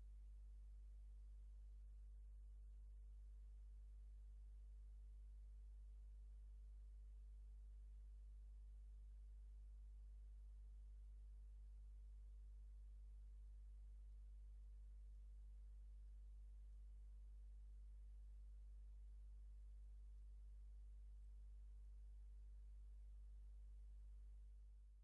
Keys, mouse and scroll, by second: 9.4 ctrl+scroll down 1, 10.1 ctrl+scroll up 1, 11.2 ctrl+click, 12.1 ctrl+scroll up 2, 13.0 ctrl+scroll down 2, 13.6 ctrl+middle click, 14.7 middle click, 15.5 ctrl+scroll up 1, 16.2 ctrl+middle click, 17.1 ctrl+scroll up 1, 19.7 middle click, 20.7 ctrl+scroll down 2, 22.0 ctrl+click.